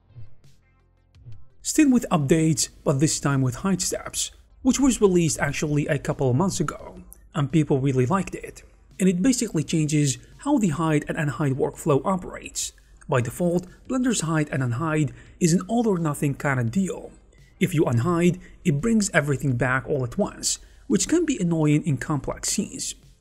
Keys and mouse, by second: 0.1 h, 0.7 shift+middle click, 0.9 Tab, 1.0 shift+middle click, 1.3 middle click, 1.6 g, 2.6 middle click, 2.9 Tab, 3.0 shift+middle click, 3.2 alt+h, 3.6 alt+h, 4.3 Tab, 4.4 g, 5.0 g, 5.6 Tab, 5.9 alt+h, 6.5 Tab, 6.7-8.1 typing, 6.9 middle click, 7.7 Tab, 8.1 middle click, 8.4 shift+middle click, 10.6 middle click, 10.8 alt+shift+h, 10.9 shift+middle click, 11.2-12.9 middle drag, 13.2 shift+middle click, 13.5 alt+h, 13.9 shift+middle click, 14.3 middle click, 15.6 shift+middle click, 15.8-18.8 typing, 16.1 shift+middle click, 17.0 click, 17.5 click, 17.8 middle click, 18.2 shift+middle click, 18.6 click, 20.0 alt+h, 20.5 middle click, 21.0 middle click, 21.8 shift+middle click, 23.1 shift+middle click.